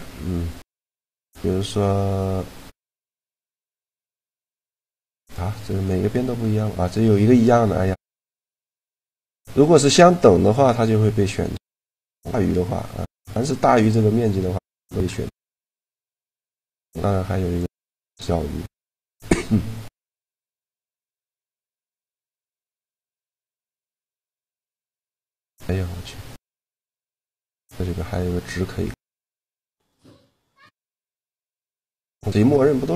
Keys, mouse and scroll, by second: 2.7-4.6 right drag, 3.2 shift+g, 7.3 middle click, 7.8 click, 8.4 middle click, 8.9 click, 9.5-11.3 drag, 12.6 middle click, 16.2-17.9 drag, 18.2-20.4 middle drag, 24.3-26.2 drag, 29.4-32.7 drag.